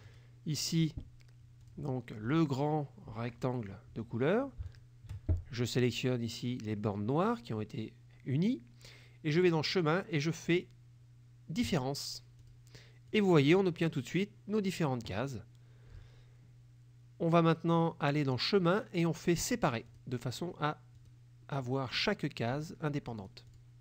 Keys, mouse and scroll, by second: 0.2 click, 1.7 click, 4.8 shift+click, 9.4 click, 11.7 click, 12.5 click, 13.2 click, 13.6 click, 18.3 click, 19.9 click, 21.1 click, 21.6 middle click, 23.3 click, 23.6 click.